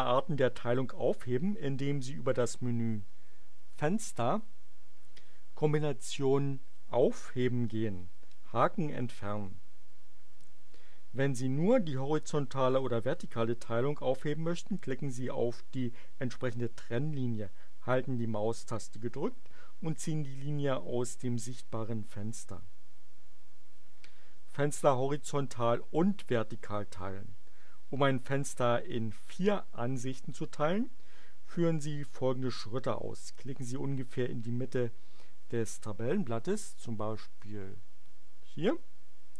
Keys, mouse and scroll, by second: 3.6 click, 8.9 click, 37.3 click.